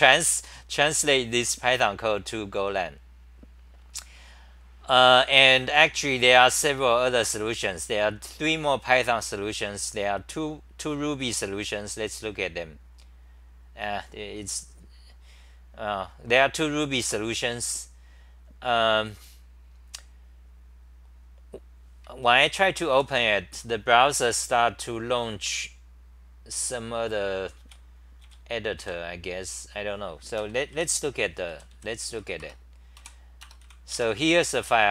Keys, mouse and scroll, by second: 8.9 typing, 27.6-28.2 scroll down 10, 27.6 `, 28.8-30.4 scroll down 10, 28.8 `, 30.4 ctrl+g, 30.7 w, 31.5 d, 32.2 Return, 33.0-34.9 typing.